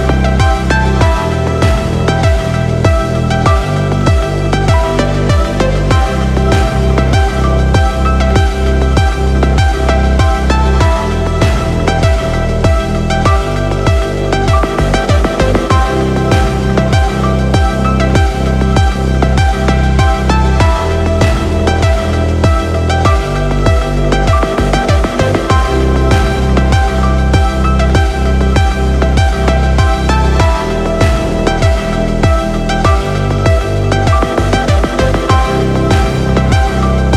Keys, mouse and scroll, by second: 0.3 click, 3.0-3.4 scroll down 3, 4.7 ctrl+alt+KP_0, 9.6 click, 10.2 click, 10.8-11.9 drag, 13.6 click, 16.0 click, 18.4-19.0 scroll down 3, 20.9 n, 21.9 click, 22.3 n, 23.1 click, 23.9-24.5 scroll down 2, 24.5 middle click, 25.9 shift+middle click, 26.7 middle click, 27.8 shift+middle click, 29.6 middle click, 35.1 click, 36.3 click.